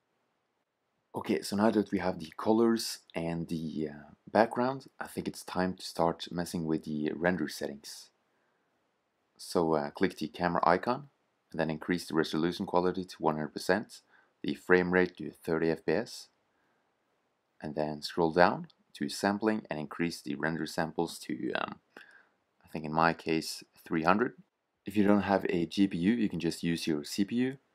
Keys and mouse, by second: 1.0 middle click, 2.5 shift+z, 2.6 click, 7.9-9.3 drag, 10.0-14.8 drag, 17.0-18.3 middle drag, 18.3-21.6 drag, 22.2 0, 24.7-25.5 drag.